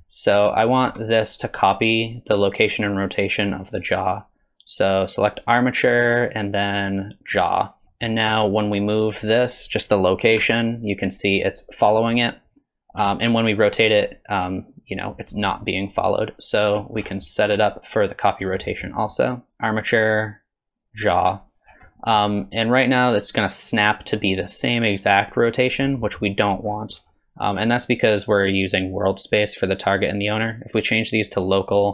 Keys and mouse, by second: 0.8 shift+middle click, 4.1-5.6 drag, 6.1-7.3 drag, 7.9 middle click, 9.1 click, 10.4 g, 13.0 r, 18.4-19.6 drag, 20.1 click, 22.0 middle drag, 26.0 middle click, 30.2-31.8 drag.